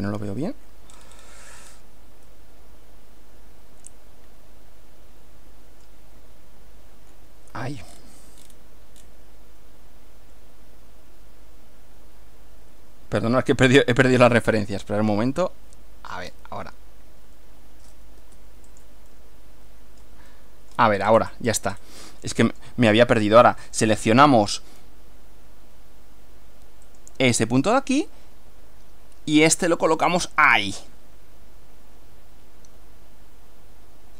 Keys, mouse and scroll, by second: 0.9 shift+scroll up 1, 1.0 scroll down 2, 1.1-1.4 scroll up 1, 1.7 scroll up 2, 2.3-6.1 middle drag, 8.0-8.6 scroll down 4, 8.6 scroll up 2, 9.0 scroll down 2, 14.2 click, 15.5-16.5 middle drag, 18.2 Escape, 18.7 click, 19.1-20.2 middle drag, 21.0-21.6 scroll up 1, 22.5 click, 23.6 click, 27.0 click, 27.6-29.6 middle drag.